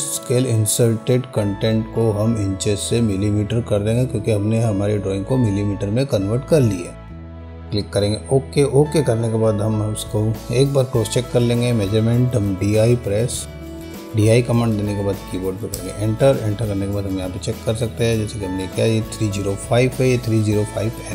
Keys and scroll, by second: 12.1 d, 12.5 i, 15.9 Return.